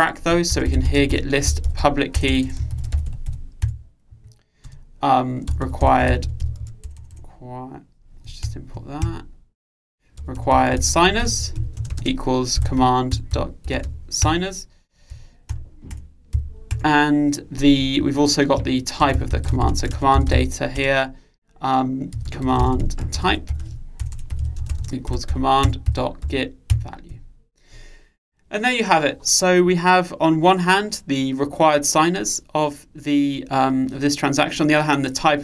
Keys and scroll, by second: 5.7 Return, 10.4 alt+Return, 15.2 Return, 27.7 Return.